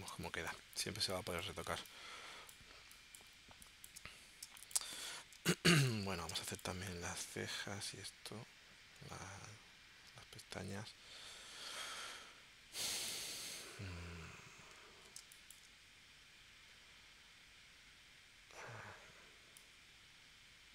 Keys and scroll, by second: 0.1 space, 1.0 space, 4.4 space, 5.4 space, 6.3 space, 10.7 p, 15.2 space.